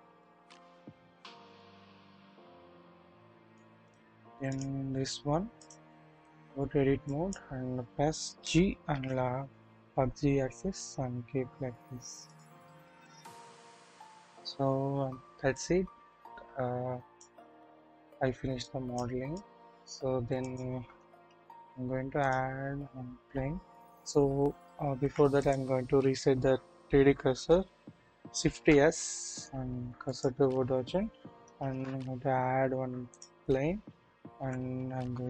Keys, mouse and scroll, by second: 0.2-0.7 shift+middle drag, 1.5 click, 1.5 scroll up 1, 4.5 click, 5.6-6.2 drag, 6.5-7.1 scroll up 1, 7.1 click, 8.4-8.9 typing, 12.6 double click, 13.0-14.2 scroll down 1, 14.2 middle click, 15.5-17.3 middle drag, 15.5-16.8 scroll up 1, 17.4-18.3 scroll up 1, 18.3 scroll down 1, 18.6-19.0 middle drag, 19.3 middle click, 20.5 middle click, 21.2 typing, 25.0 Delete, 25.0 typing, 25.4 click, 28.5 typing, 31.4 scroll, 31.5 typing, 33.5 scroll down 1, 34.3 typing.